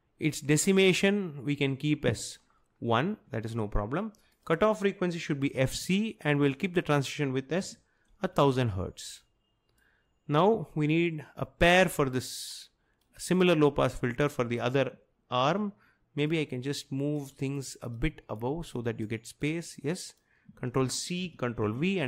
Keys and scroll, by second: 5.4-6.2 typing, 7.5-8.5 typing, 21.3 ctrl+c, 21.6 ctrl+v.